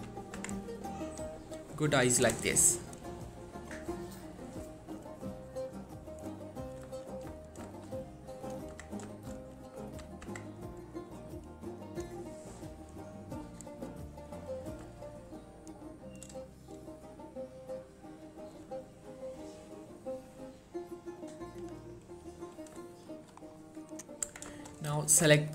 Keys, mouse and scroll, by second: 0.1 1, 0.5 Tab, 0.8-1.2 scroll down 1, 1.2 click, 2.6 shift+middle click, 7.1 3, 7.6-8.6 scroll up 2, 7.9 shift+middle click, 8.6 click, 8.9 Tab, 9.3 shift+middle click, 10.0 1, 10.4 Tab, 11.1-11.6 scroll down 1, 12.0 click, 13.0-13.5 scroll up 1, 14.9 scroll down 1, 15.1-16.1 shift+middle drag, 22.9 shift+middle click, 23.5-24.0 shift+scroll up 1, 24.0 click, 24.4 Tab, 24.7 shift+middle click, 24.9-25.4 scroll up 1.